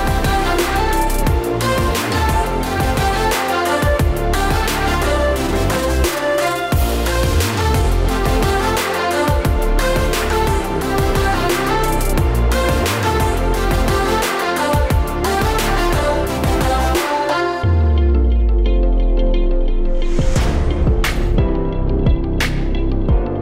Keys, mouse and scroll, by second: 0.0-0.4 scroll up 2, 0.4 click, 1.2 click, 1.6 click, 2.1 click, 2.4 click, 4.7 click, 5.8 click, 6.6 click, 7.2 click, 7.9 click, 8.5 click, 9.2 click, 9.8 click, 11.0 click, 11.3 click, 12.0 middle click, 12.5 scroll up 3, 12.8 shift+middle click, 13.1 middle click, 13.8 shift+middle click, 14.3 scroll up 2, 14.6 shift+middle click, 16.0 ctrl+alt+KP_0, 16.8 click, 18.3 g, 19.2 click, 19.7 click, 20.0 click, 20.6 click, 21.4 click, 22.6 click.